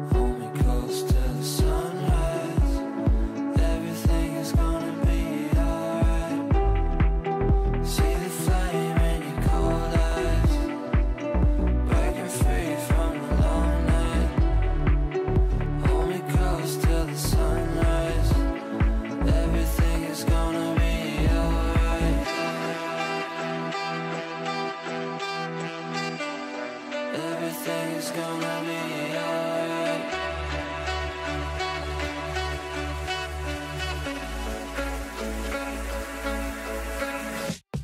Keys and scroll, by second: 34.8 ctrl+q.